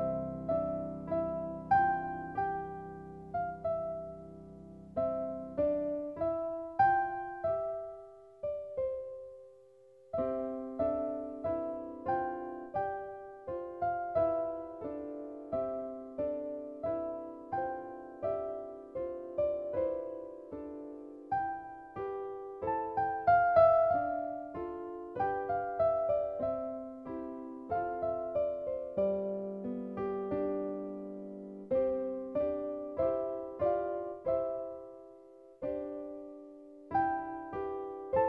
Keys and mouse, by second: 2.2 click, 3.6 click, 5.1 click, 9.7 click, 10.9 click, 13.1 super+middle click, 13.9 shift+middle click, 21.1 click.